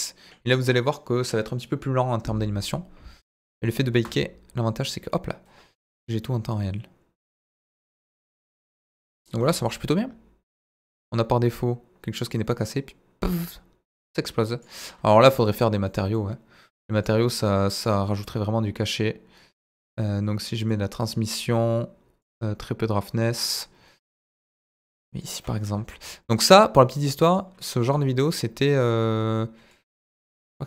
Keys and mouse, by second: 3.9 space, 9.4 space, 9.7-14.6 drag, 15.1 middle drag, 15.5 click, 15.9 middle drag, 17.0 click, 17.8 click, 20.7 click, 22.3-23.3 drag, 24.9 click, 25.7 z, 26.6-27.4 drag, 27.7 z, 30.5 click.